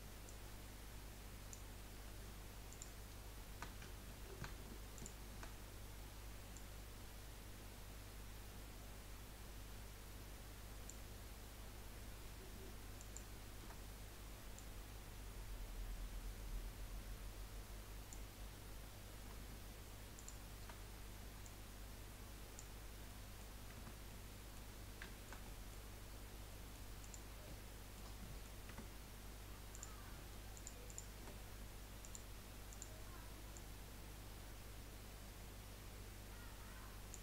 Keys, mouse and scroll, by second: 0.3 click, 2.7 alt+shift+click, 4.1 ctrl+z, 5.0 alt+shift+click, 6.5 click, 13.0 alt+shift+click, 14.6 click, 20.1 alt+shift+click, 21.4 click, 22.8 scroll down 3, 23.1 middle click, 23.7 Tab, 24.1-24.8 middle drag, 24.8-25.1 scroll down 2, 25.1 shift+middle click, 25.9-26.2 scroll down 2, 26.6-27.0 middle drag, 27.0 click, 27.5-28.7 middle drag, 28.7 Tab, 29.8 click, 30.5 alt+shift+click, 30.8 alt+shift+click, 32.0-33.8 drag.